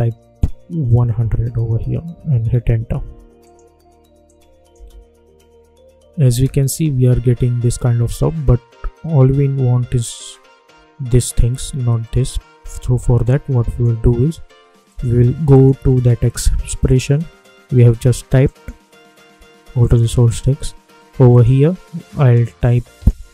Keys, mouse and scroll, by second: 2.6 Return, 3.4 click, 4.7 space, 9.9-10.7 alt+scroll up 1, 13.2-14.8 drag.